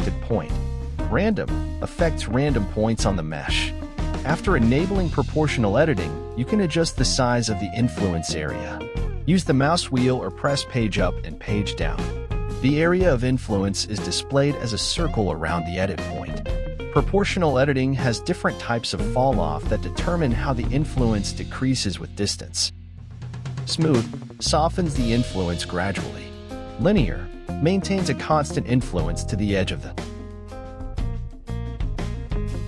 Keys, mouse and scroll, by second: 2.5-4.0 drag, 4.0 g, 8.9-10.7 drag, 10.7 g, 12.3 g, 17.8-19.7 drag, 19.7 g, 27.1-29.0 drag, 29.0 g.